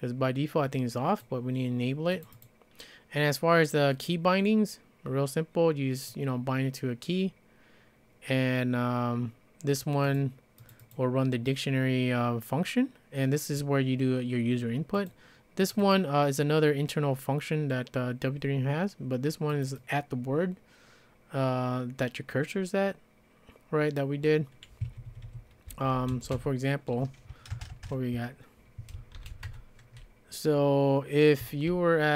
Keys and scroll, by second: 24.8 Escape, 25.2 Escape, 25.7-26.6 typing, 27.5 ctrl+space, 27.7 ctrl+space, 28.9-29.8 typing.